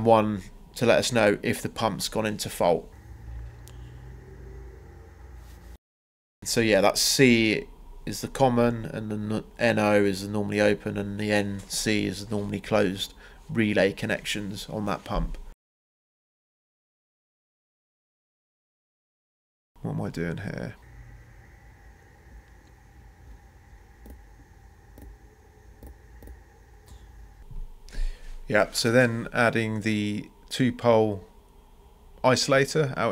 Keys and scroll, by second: 10.0 ctrl+c, 10.2 ctrl+v, 24.1 ctrl+v, 25.8 BackSpace, 26.1 Escape, 28.3 Escape.